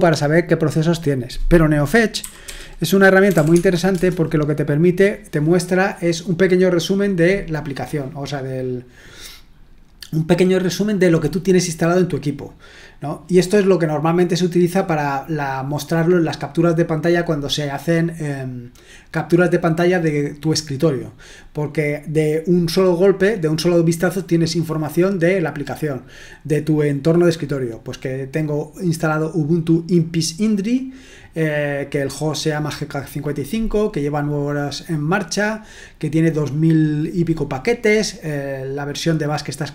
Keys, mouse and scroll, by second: 2.2-3.8 typing, 3.9 Return.